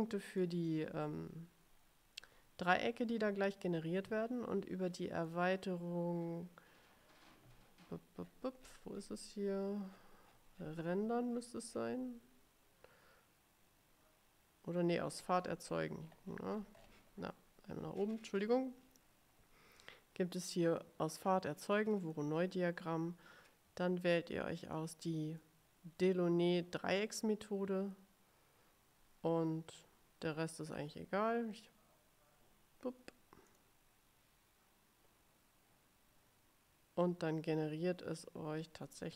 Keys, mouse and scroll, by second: 5.4 click, 8.3-9.3 scroll down 4, 10.0-12.1 scroll down 12, 15.2-17.2 scroll up 4, 22.2 click, 24.9 click, 33.6 click.